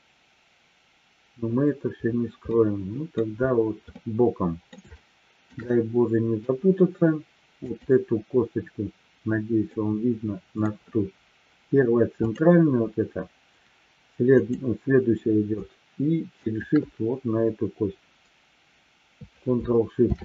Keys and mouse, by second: 2.4-3.2 middle drag, 4.0-4.7 middle drag, 4.8-5.4 shift+middle drag, 5.6-6.4 middle drag, 7.6-9.2 drag, 9.7 middle click, 12.1 click, 14.3 click, 16.3-17.1 shift+drag, 20.0 ctrl+shift+c.